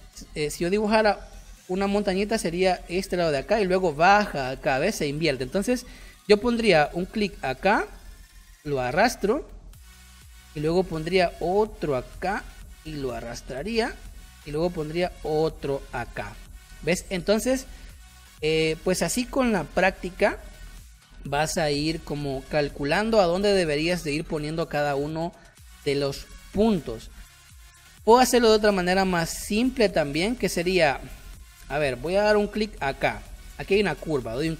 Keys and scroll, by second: 21.8 space, 27.9 ctrl+z, 30.8 space.